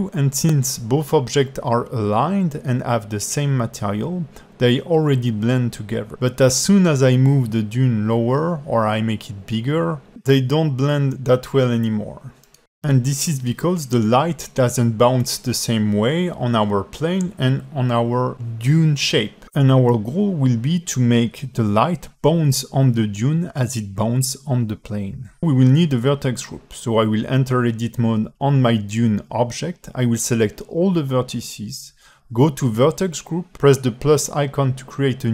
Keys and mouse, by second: 0.8-2.2 alt+middle drag, 3.4 click, 3.9 click, 5.7 g, 6.9 alt+middle click, 7.8 alt+middle click, 14.2 g, 21.0 s, 23.8 s, 25.2 g, 25.5 alt+drag, 26.1 Tab, 26.4 a, 30.7 click, 32.9 a.